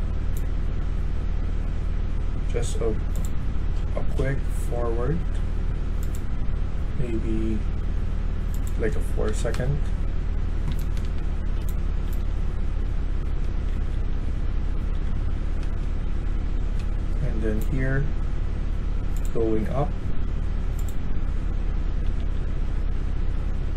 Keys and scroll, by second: 0.7 s, 4.8 w, 9.2 4, 9.4 Return, 10.6-13.9 typing, 15.6 typing, 17.0 s, 19.5 q, 22.1-23.7 typing.